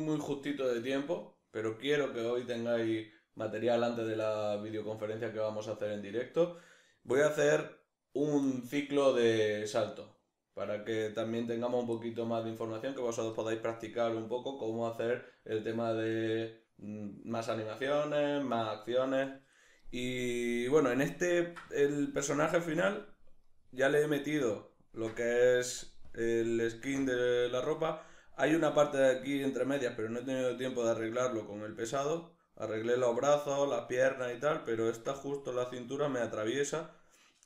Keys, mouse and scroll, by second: 26.1-26.5 drag, 26.5 middle click, 26.9 space, 29.8 middle click.